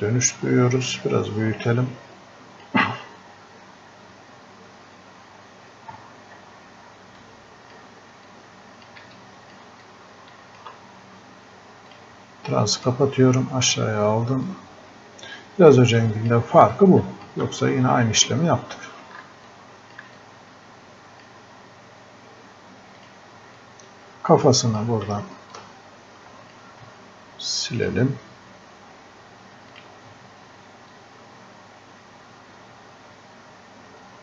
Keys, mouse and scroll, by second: 5.3 scroll up 1, 5.7 scroll down 1, 7.2-18.0 drag, 18.0-18.6 scroll up 1, 19.5-34.2 alt+drag.